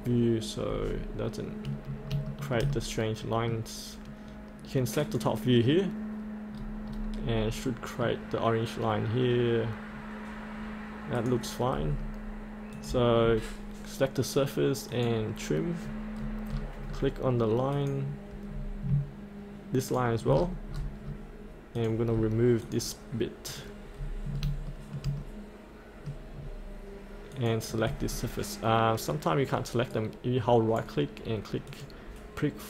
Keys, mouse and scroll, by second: 0.1-0.7 scroll up 1, 2.3 shift+middle click, 5.0 click, 6.6-6.9 scroll down 1, 7.7 middle click, 11.2 click, 11.8-12.7 scroll up 1, 12.7-13.8 drag, 16.5-16.9 scroll down 1, 17.7 click, 18.5-18.9 scroll down 1, 19.9 ctrl+click, 20.3-20.7 scroll up 1, 21.7 click, 22.6 click, 23.9 click, 24.0-24.3 scroll up 1, 24.7 shift+middle click, 25.2 middle click, 26.4 scroll down 1, 27.3-29.0 drag, 29.9-31.1 right drag, 31.7 click.